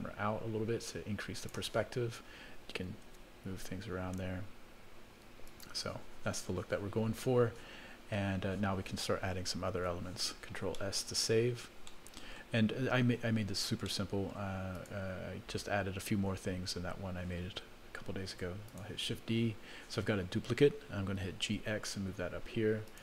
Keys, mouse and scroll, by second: 3.0 shift+`, 9.8 ctrl+s, 10.7 middle click, 11.3-11.9 scroll down 1, 11.9 middle click, 11.9 scroll down 2, 12.5 scroll down 2, 13.8 middle click, 14.7 click, 15.3 scroll up 1, 16.1-16.9 scroll down 4, 16.4-16.9 scroll up 1, 16.9 scroll up 1, 18.3 shift+d, 21.4 g.